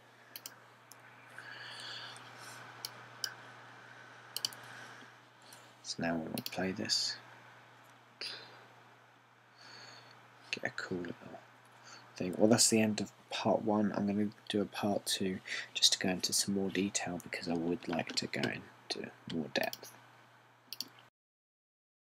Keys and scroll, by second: 0.6 BackSpace.